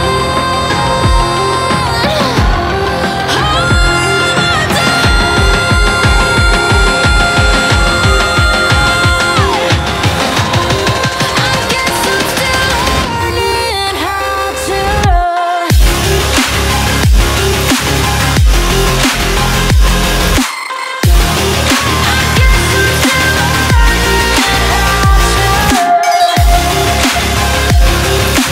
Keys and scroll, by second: 16.6-18.6 typing, 19.1 ctrl+-, 19.5 ctrl+-, 25.3 x, 27.3 ctrl+=.